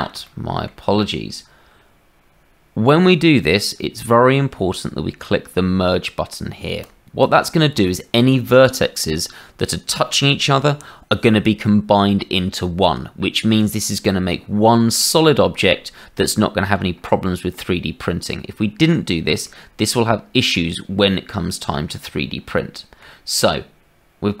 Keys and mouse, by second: 0.2 shift+middle click, 6.8 middle click, 16.2 shift+middle click, 19.4-21.7 drag, 22.5 shift+middle click.